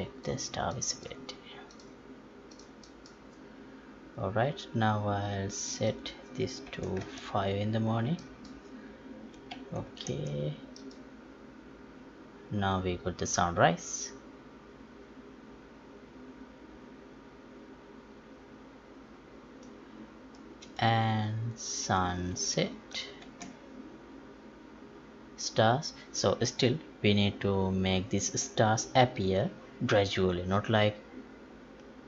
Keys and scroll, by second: 9.5 F11, 10.1 alt+p.